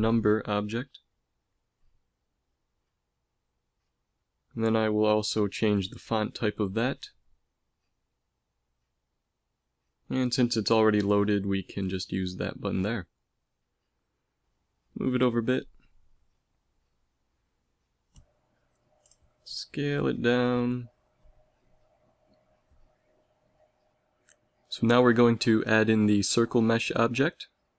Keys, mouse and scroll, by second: 0.3 Tab, 1.0 BackSpace, 1.4 BackSpace, 2.2 1, 4.0 Tab, 13.9 g, 18.7 s, 21.3 g, 23.3-24.8 middle drag, 24.0 g, 25.7 a, 26.5 shift+a.